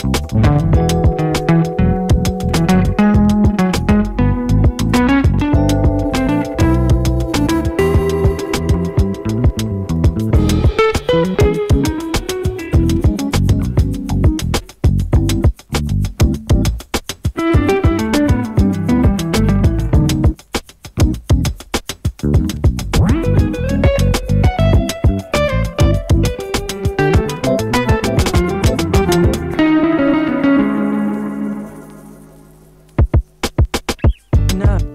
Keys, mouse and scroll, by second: 0.4 click, 1.8 [, 3.0 click, 4.2 [, 4.7 space, 6.8-11.8 drag, 11.8 space, 13.5-18.2 drag, 18.2 space, 20.1 click, 20.6 space, 22.4 click, 23.3 space, 26.0 click, 26.9 shift+click, 27.9 ctrl+shift+c, 28.7 Return.